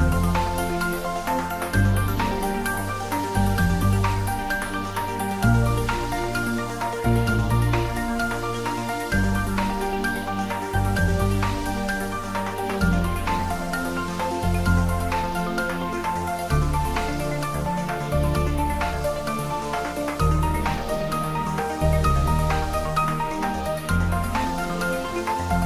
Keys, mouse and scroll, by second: 0.3 scroll up 1, 1.2-2.8 middle drag, 2.8 click, 5.3-6.6 typing, 7.3 Return, 10.9-14.8 drag, 14.8-15.4 scroll down 1, 15.9-20.1 middle drag, 20.3 middle click, 20.3-20.7 scroll down 1, 24.2 click.